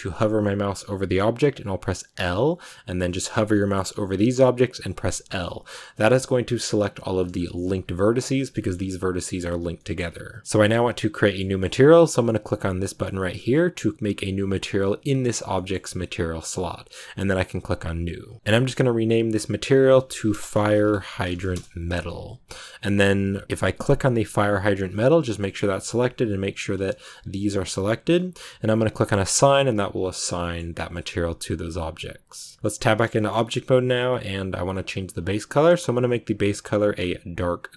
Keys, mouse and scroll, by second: 2.1 l, 7.1 click, 7.5 g, 8.4 middle click, 8.6 g, 9.7 middle click, 10.5 click, 11.1-14.6 middle drag, 14.6 click, 15.4-17.3 shift+middle drag, 17.3-18.4 drag, 19.0-21.4 drag, 23.4-26.2 drag, 26.8-29.2 shift+middle drag, 29.2-30.3 drag, 30.3 middle click, 30.9 Tab, 32.9 scroll down 1, 33.1-36.0 shift+middle drag, 36.0 click.